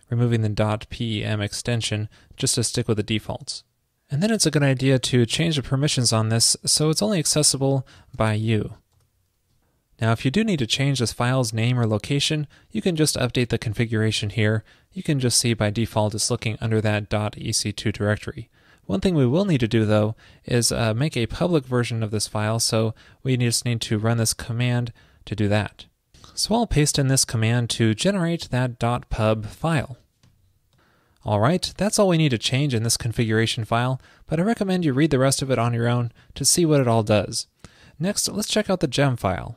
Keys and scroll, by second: 27.1 super+v.